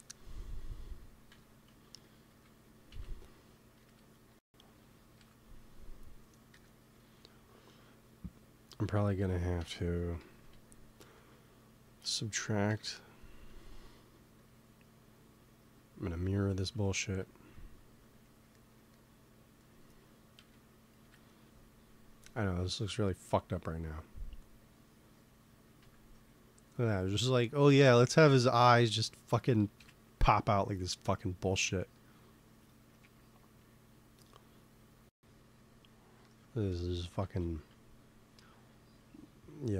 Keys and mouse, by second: 0.1 Tab, 1.2 Tab, 1.6 z, 2.0 g, 2.8 z, 3.7 KP_3, 5.0 g, 5.9-7.8 drag, 6.4 KP_1, 6.8 Tab, 9.1 Tab, 9.5 z, 9.9 z, 10.0-11.9 drag, 10.2 g, 10.9 Tab, 11.9 z, 12.6 shift+s, 16.4 z, 16.9 ctrl+s, 20.3 KP_3, 20.9 KP_1, 24.3-26.2 drag, 25.7 a, 26.9 middle click, 29.6 KP_1, 34.9 click, 35.8-36.8 right drag, 36.1 click, 36.8 middle click, 37.1 z, 37.4 z.